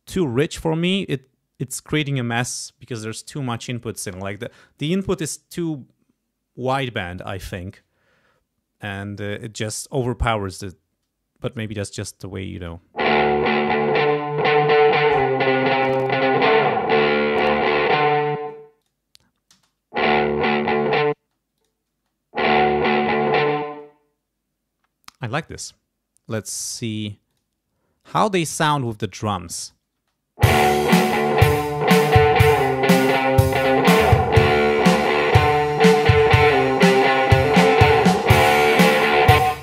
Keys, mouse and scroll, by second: 11.6 click, 12.5 space, 14.0-15.4 drag, 15.8 click, 17.4 click, 18.3 space, 18.8 click, 19.5 space, 21.1 space, 21.5 click, 21.9 space, 23.6 space, 25.4 click, 27.2 click, 28.0 click, 28.3 scroll up 2, 29.6 click, 29.9 space, 31.6 scroll down 2, 39.4 space.